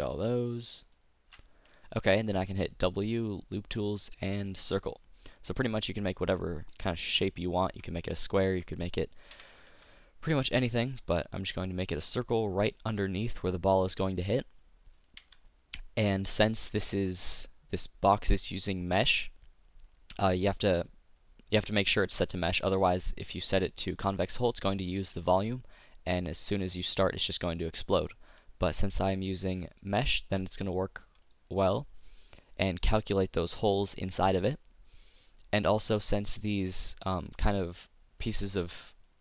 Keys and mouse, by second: 2.5 w, 7.2-9.7 typing, 10.9 s, 12.8 z, 15.3 Tab, 22.1 KP_5, 23.3-25.3 drag, 25.9-31.5 drag, 31.5-34.4 middle drag, 35.9-37.0 right drag, 36.6 middle click, 37.2 click, 37.2 z, 37.6 right click, 38.3 click, 38.5 z, 39.0-39.2 right drag.